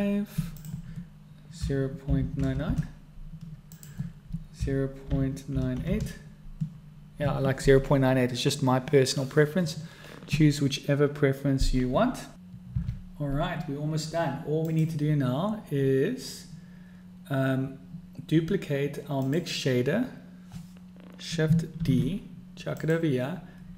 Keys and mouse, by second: 2.6 9, 14.7 click, 19.3 click, 21.9 shift+d.